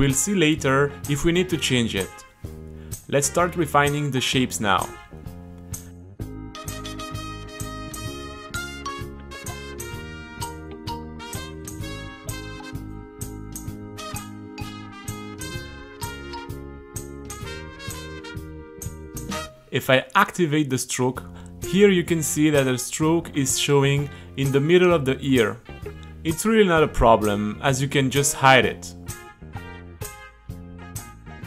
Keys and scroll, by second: 7.3-8.8 typing, 9.7 Return, 9.9 t, 11.2-15.0 typing, 18.3 q, 19.1 Return, 19.4 super+r, 24.3 h, 27.6 super+r.